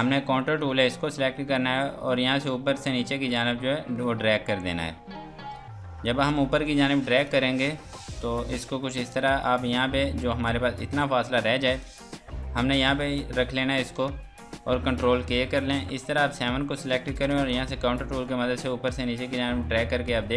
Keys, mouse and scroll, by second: 1.4 scroll down 1, 2.1 click, 5.8 F2, 6.0 click, 6.8 F2, 7.0 click, 10.9 scroll down 1, 11.4 F2, 11.6 click, 12.6 F2, 12.7 click, 13.3 scroll down 1, 14.0 ctrl+space, 16.0 Escape, 16.3 click.